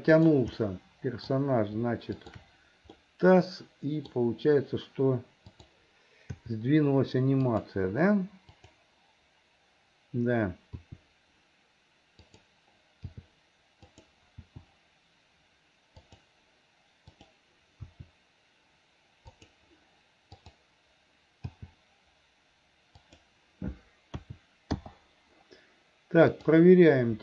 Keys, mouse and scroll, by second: 0.1 click, 0.6 middle click, 2.1 shift+click, 3.0-4.1 middle drag, 5.6 click, 6.4 g, 8.6 click, 10.7 r, 13.2 g, 14.5 r, 17.1 click, 17.9 r, 20.3 click, 21.6 g, 24.3 a, 24.9 i, 26.3 click.